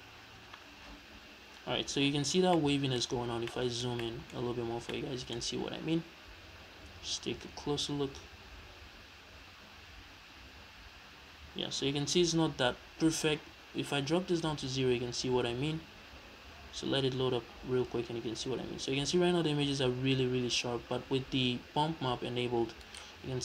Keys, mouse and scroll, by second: 2.4 scroll down 2, 2.6-3.4 middle drag, 3.1 scroll up 2, 4.0 middle click, 4.5 scroll up 1, 4.9 shift+middle click, 6.8 scroll up 1, 14.4-23.0 drag, 23.0 right click.